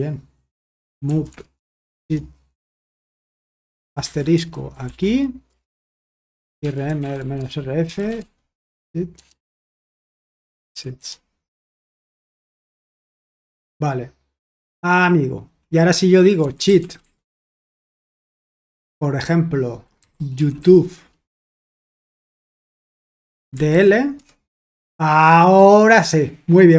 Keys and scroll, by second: 0.6-2.2 typing, 4.0-13.6 typing, 16.1-17.4 typing, 19.7-24.1 typing.